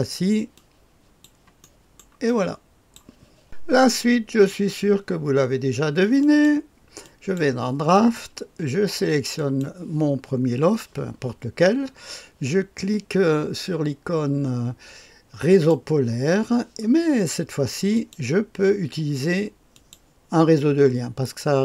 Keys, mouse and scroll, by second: 0.5 click, 1.5 middle click, 2.3 click, 3.9 click, 6.1 click, 7.0 click, 9.3 click, 15.4 click, 17.9 click, 19.7 click.